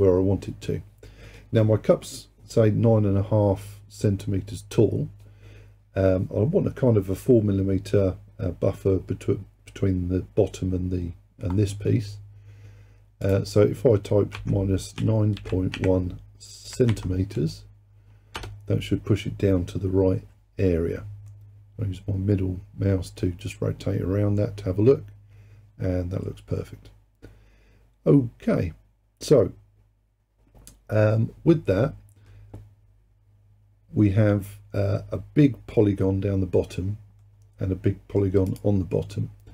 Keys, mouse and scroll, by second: 13.3-16.4 drag, 21.3-24.3 middle drag, 28.5-31.5 middle drag, 33.4-34.5 scroll down 2, 34.5-37.2 scroll up 2, 37.2-38.5 middle drag, 38.5 click.